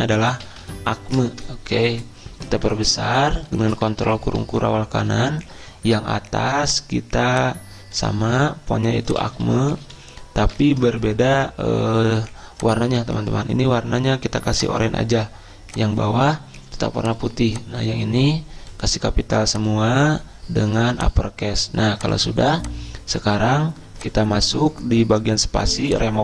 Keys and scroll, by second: 0.2-1.1 typing, 1.4 Return, 2.7 ctrl+], 3.2 ctrl+], 3.3 ctrl+], 9.5 typing, 10.9 Return.